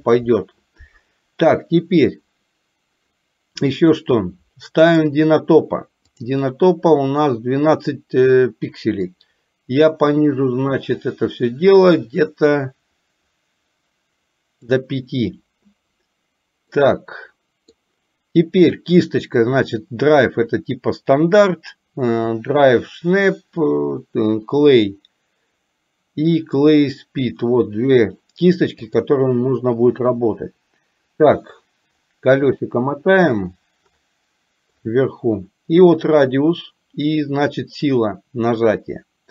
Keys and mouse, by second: 4.9 click, 6.1-15.1 drag, 16.7-17.7 middle drag, 29.0 click.